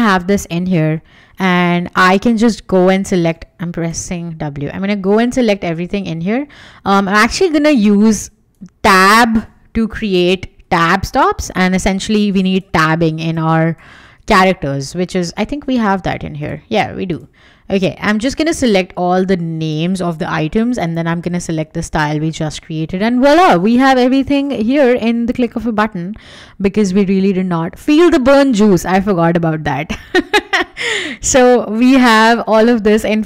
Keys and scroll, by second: 3.9 w, 9.9 BackSpace, 10.6 Tab, 11.5 Escape, 13.8 BackSpace, 14.0 Tab, 14.3 Escape, 22.8 Escape, 26.3 w.